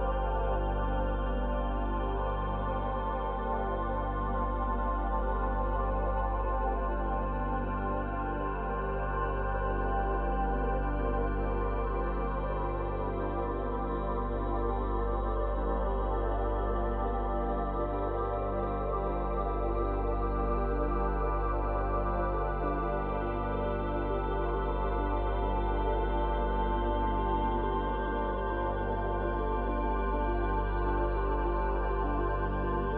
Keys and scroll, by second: 9.8 space, 13.0 space, 16.1 space, 25.0 space, 27.8 ctrl+z, 28.3 space, 30.6 space.